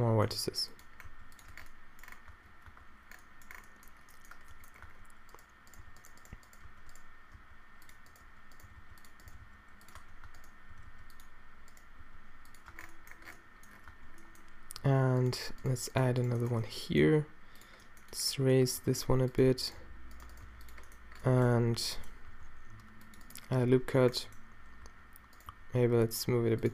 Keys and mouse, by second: 0.3 g, 1.2 g, 1.6 Tab, 2.4 Tab, 2.7 Tab, 4.9 Tab, 5.8 g, 6.7 d, 7.4 d, 8.7 g, 9.3 g, 10.0 Tab, 10.3 Tab, 10.8 g, 12.0 g, 12.7 Tab, 13.9 Tab, 15.2-16.7 middle drag, 17.0 middle click, 17.1 g, 18.8 g, 19.8 g, 20.5 shift+g, 21.8 a, 22.3 ctrl+r.